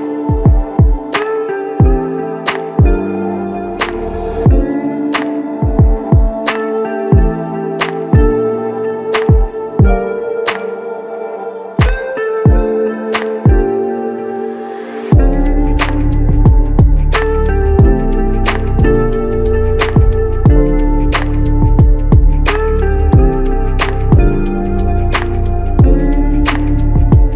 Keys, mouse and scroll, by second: 9.1 alt+click, 20.3 ctrl+click, 21.2 ctrl+click, 23.2 alt+click, 26.6 alt+click.